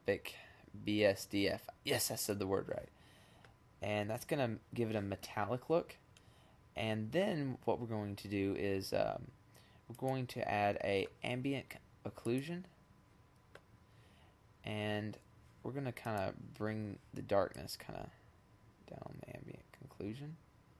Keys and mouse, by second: 4.8-6.4 middle drag, 8.5 click.